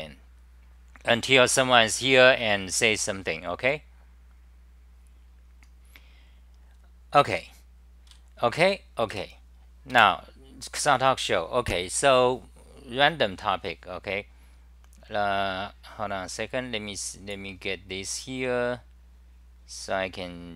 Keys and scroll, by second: 8.1-8.5 r, 9.2 Return, 9.9 super+r.